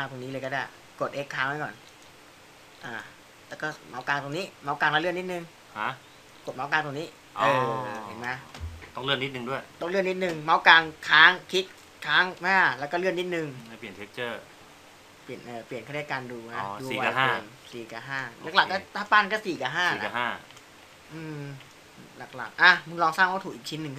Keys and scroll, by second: 3.8 x, 13.6 5, 14.9-22.8 typing.